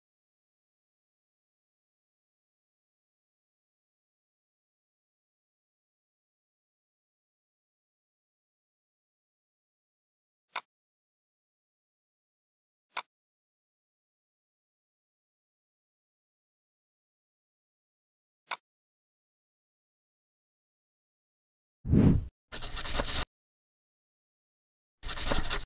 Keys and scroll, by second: 3.9 ctrl+r, 8.5 ctrl+a, 14.7 F4.